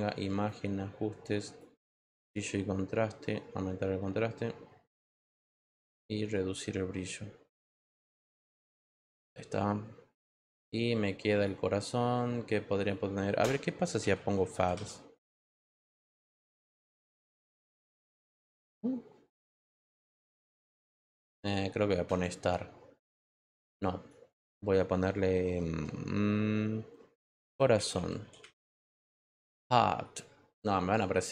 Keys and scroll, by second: 13.7-15.2 typing, 15.7 Return, 27.3-28.6 typing.